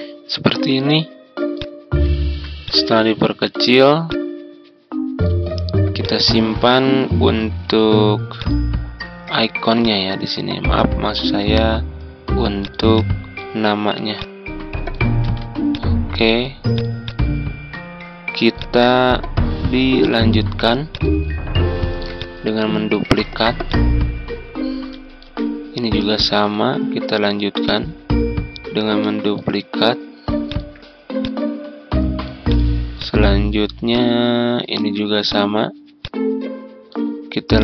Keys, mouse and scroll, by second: 0.1 scroll down 1, 1.5 click, 3.2-4.0 ctrl+scroll down 1, 4.0-8.3 drag, 9.7-14.9 drag, 15.2 ctrl+z, 15.7-19.9 drag, 21.7 ctrl+d, 22.1 click, 23.1 ctrl+z, 23.6-25.5 drag, 25.9 ctrl+d, 27.6-29.5 drag, 31.2-34.6 drag, 34.7 ctrl+z, 35.2-37.6 drag.